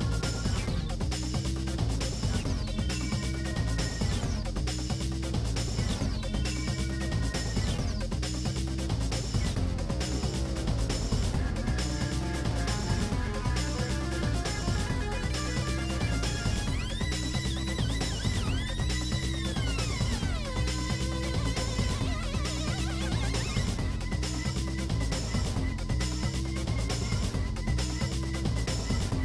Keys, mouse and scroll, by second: 0.2 l, 0.4 shift+d, 2.0 g, 3.8 g, 4.1 click, 4.4 l, 4.6 g, 4.9 middle click, 5.2-5.5 scroll down 4, 5.5 click, 5.7 middle click, 10.8 click, 11.1 middle click, 11.9-12.3 scroll up 1, 12.4 click, 13.0 scroll up 1, 13.2 middle click, 13.4 click, 14.2 ctrl+s, 14.4 Tab, 14.6 click, 14.8 Tab, 15.4 shift+middle click, 15.8 scroll down 1, 15.9-18.7 shift+middle drag, 18.7 scroll up 4, 19.0 shift+middle click, 20.3 shift+h, 21.5 alt+h, 21.7 click, 22.5 middle click, 23.0 alt+click, 23.3 middle click, 24.1 shift+d, 25.2 g, 26.5 KP_1.